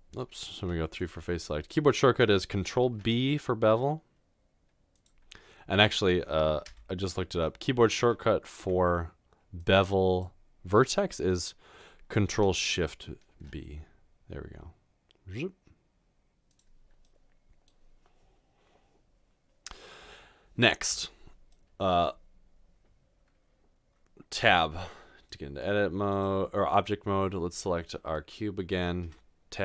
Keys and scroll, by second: 0.0-0.6 typing, 2.8 b, 6.7 Tab, 7.3 typing, 8.6 Tab, 13.4 ctrl+shift+b, 24.4 Tab, 29.1 Tab.